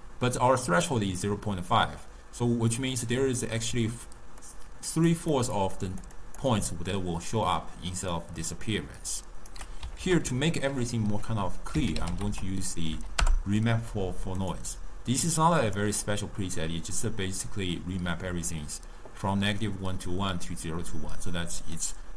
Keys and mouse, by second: 1.4 d, 3.8-8.1 typing, 4.5 click, 5.4 click, 5.9 click, 6.3 click, 8.2-9.6 right drag, 9.6 d, 9.7 d, 10.1 ctrl+a, 15.3-18.3 drag, 21.8-22.1 drag.